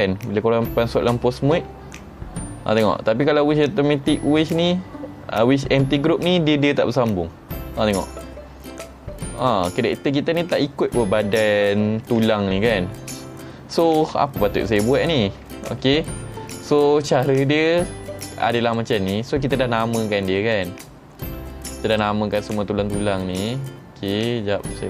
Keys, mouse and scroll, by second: 1.6 r, 9.4 right click, 12.1 ctrl+Tab, 12.7 middle click, 12.7 scroll up 4, 14.8 click, 17.8-18.6 middle drag, 17.8-18.6 scroll down 2, 18.6 click, 19.9 Tab, 20.6 click, 21.9 click.